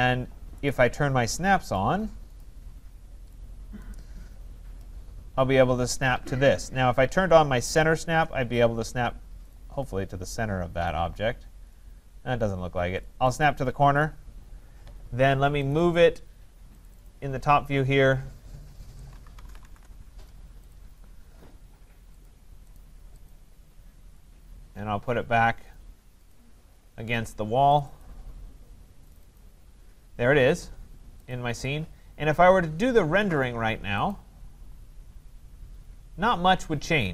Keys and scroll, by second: 19.7 Return.